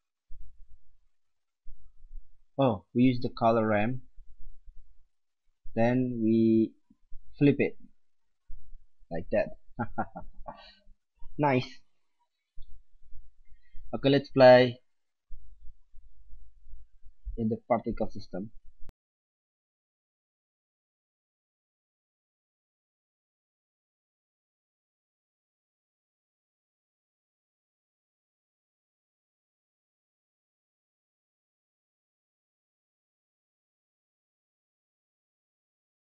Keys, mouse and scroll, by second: 1.9 middle click, 2.6 click, 2.6 middle click, 2.8-5.5 drag, 8.0-9.7 drag, 13.0-15.2 middle drag, 15.4-16.4 drag, 16.4-17.4 middle drag, 19.6 click, 21.7 click, 22.1 KP_0, 23.2-23.8 middle drag, 24.2 click, 25.4 middle drag, 27.1 click, 28.2-28.8 middle drag, 29.8 middle drag, 30.1 s, 30.6 middle click, 32.3-32.8 middle drag, 35.8-36.0 middle drag.